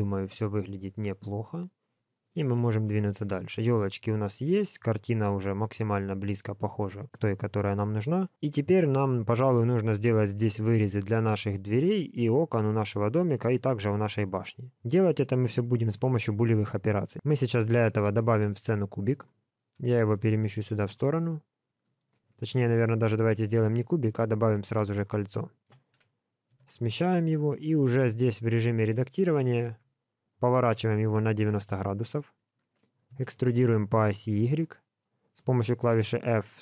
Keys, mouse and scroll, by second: 1.2 middle click, 3.3 middle click, 6.3 middle click, 17.7 KP_3, 18.2 shift+a, 20.2 g, 21.2 middle click, 22.6 x, 23.6 shift+a, 25.6 KP_3, 26.5 g, 28.4 g, 29.1 shift+middle click, 29.4 scroll up 4, 29.6 Tab, 30.5 r, 33.1 e, 34.9 middle click, 36.1 f, 36.4 middle click.